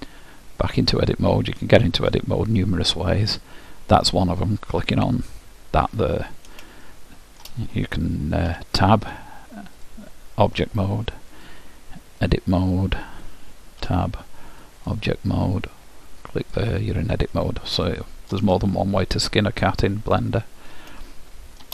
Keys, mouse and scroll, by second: 0.1-2.7 drag, 7.0-8.7 middle drag, 8.6 Tab, 12.4-13.4 drag, 14.0 Tab, 16.6-18.4 drag, 18.0-20.3 middle drag, 21.2-21.7 middle drag.